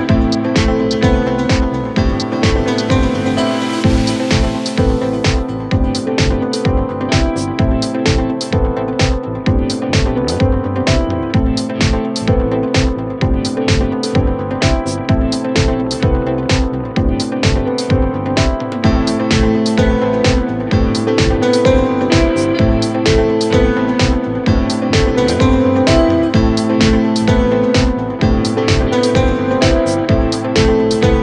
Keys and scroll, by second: 10.0 shift+Page_Down, 10.4 Escape, 13.9 g, 24.2 g.